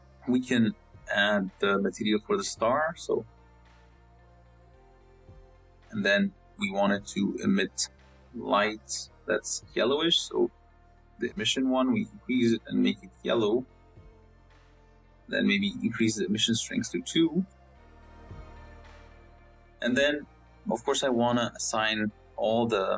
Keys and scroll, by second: 19.7 z, 20.8 z.